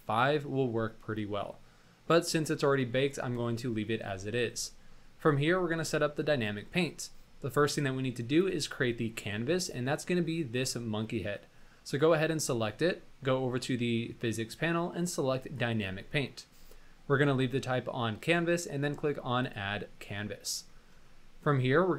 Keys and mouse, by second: 0.8-2.1 middle drag, 3.5-4.5 middle drag, 4.7 shift+middle drag, 5.0 middle click, 8.3 click, 15.3 click, 19.3 click.